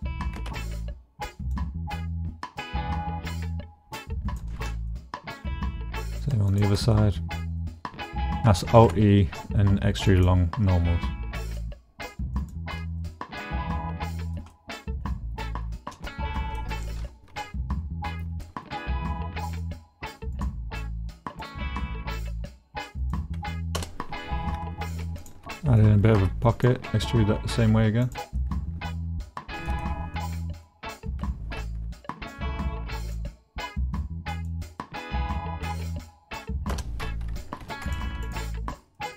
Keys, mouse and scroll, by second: 0.5 alt+e, 4.3 click, 4.9 middle click, 6.2 middle click, 6.9 middle click, 7.6 middle click, 8.7 alt+e, 12.4 middle click, 13.0 middle click, 14.2 shift+middle click, 14.5 middle click, 15.5 middle click, 16.3 shift+middle click, 17.4 middle click, 18.4 middle click, 19.3 k, 24.9 middle click, 25.0 shift+middle click, 25.6 click, 26.2 alt+e, 28.0 click, 28.4 click, 29.5 shift+middle click, 29.8 middle click, 30.7 middle click, 31.2 k, 37.6 3, 38.2 shift+click, 38.6 click.